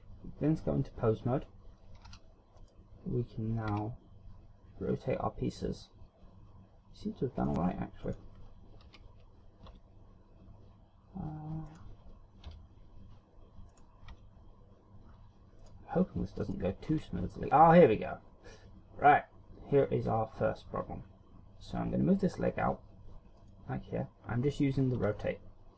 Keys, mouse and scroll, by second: 2.2 z, 2.6 right click, 3.7 r, 7.5 right click, 8.1 right click, 8.9 KP_7, 9.7 r, 11.8 right click, 12.5 KP_1, 13.8 right click, 14.1 r, 15.7 right click, 16.5 right click, 17.0 r, 23.6 click, 25.1 r.